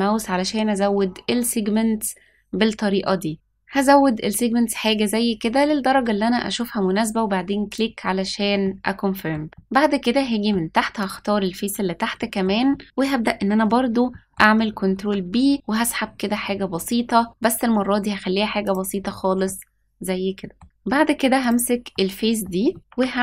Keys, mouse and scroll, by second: 8.6 middle click, 9.5 middle click, 10.9 click, 11.4-12.0 scroll up 1, 12.1 shift+middle click, 12.6 middle click, 14.0 middle click, 14.8 ctrl+b, 16.7 s, 19.4-20.5 middle drag, 21.4 click, 21.9 middle click, 22.7 shift+middle click, 22.8 e.